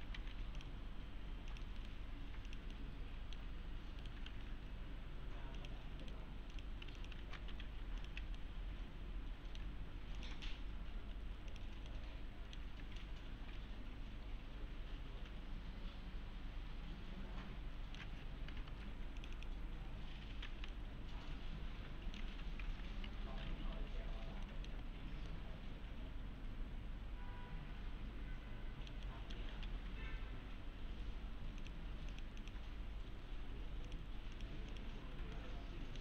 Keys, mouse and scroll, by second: 0.2 alt+c, 0.6 click, 1.8 right click, 2.5 click, 2.7-3.4 alt+middle click, 4.0 right click, 4.3 alt+1, 5.6 click, 6.0 right click, 6.5 click, 7.0 ctrl+click, 7.2 ctrl+shift+e, 7.5 2, 8.0 click, 8.4-9.6 alt+middle click, 10.2 click, 11.9-12.8 alt+middle click, 12.7 scroll down 1, 13.0-18.0 alt+middle click, 19.2 click, 20.7-22.3 alt+middle click, 23.7 1, 24.1 scroll up 1, 24.5 alt+middle click, 25.0 scroll down 1, 25.3-25.9 alt+middle click, 29.3-30.2 typing, 31.6 click, 35.4-36.0 alt+middle click.